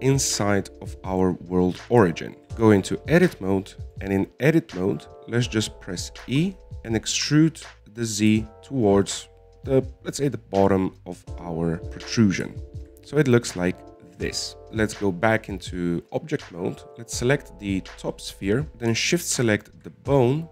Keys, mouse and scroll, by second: 1.1-2.6 scroll up 4, 2.6 shift+scroll up 1, 2.7-4.0 shift+middle drag, 4.0 Tab, 5.0-7.6 shift+middle drag, 7.6 e, 10.7 scroll down 4, 13.9 shift+middle click, 14.7-15.4 scroll up 1, 15.4 shift+middle click, 16.0 Tab, 18.4 right click, 18.7-20.0 drag.